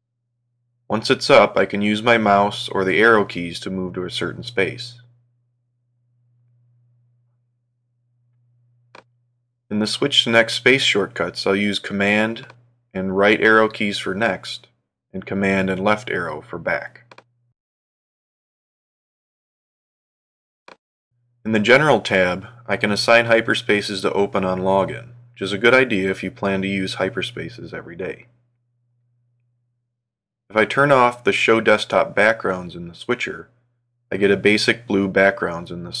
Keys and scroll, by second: 3.0 alt+', 4.1 Up, 5.1 Right, 6.5 Return, 10.7 super+Right, 13.6 super+Left, 33.0 alt+æ, 35.7 alt+'.